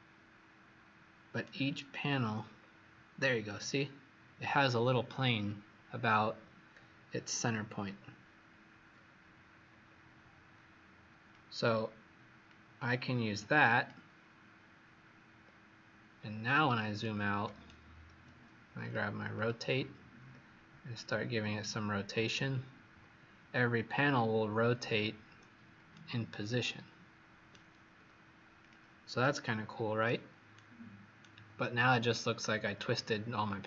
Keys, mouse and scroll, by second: 2.1-2.5 scroll up 4, 3.2-5.6 scroll down 1, 6.0-7.6 scroll down 2, 7.6-8.8 scroll up 2, 8.8-9.4 scroll up 2, 9.4 scroll down 1, 11.2 click, 16.1 scroll down 4, 16.9 right click, 18.8 click, 19.3 click, 21.5 click, 25.9 shift+right click, 28.6 click, 29.1 right click, 30.4 right click, 31.7-32.3 scroll down 2, 32.7-33.6 scroll up 3.